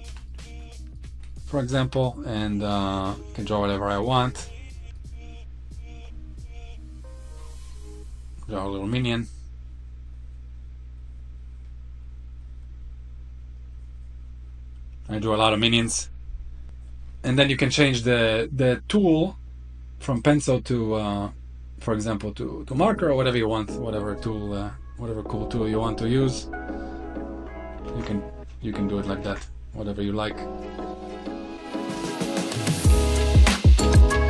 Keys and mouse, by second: 1.5 click, 3.1 click, 3.9 click, 4.8 click, 5.7 click, 6.6 click, 7.3 click, 7.7 click, 8.8 click, 9.7 click, 10.6 click, 11.7 click, 12.1 click, 13.4 click, 15.1 click, 15.5 click, 16.2 click, 19.8-22.4 drag, 24.7 click, 25.2 click, 25.6 click, 26.6 click, 27.5 ctrl+z, 27.7 click, 28.9 ctrl+z, 29.0 click, 30.1 click, 30.9 click, 31.5 click, 32.1 middle click, 32.7 s.